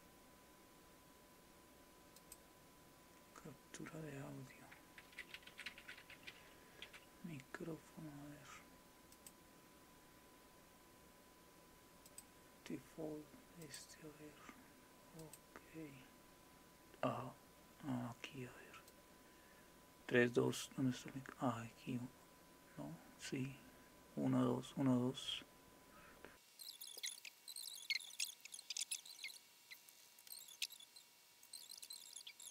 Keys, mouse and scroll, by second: 2.2 click, 9.1 click, 12.1 click, 13.6 click, 15.2 click, 18.9-26.3 drag.